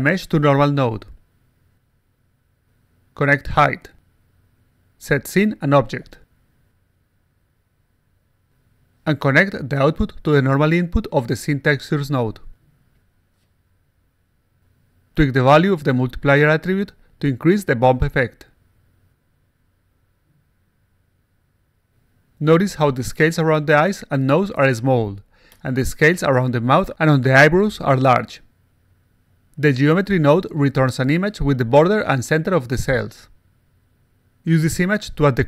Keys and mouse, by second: 0.3-1.4 drag, 3.0 click, 4.7 click, 5.1 click, 5.3 click, 5.8 click, 7.1-8.0 alt+drag, 10.0-11.2 drag, 12.2 click, 13.7-14.3 alt+drag, 16.2 click, 18.1 click, 19.4 click, 20.4 click, 21.0 8, 30.3 click.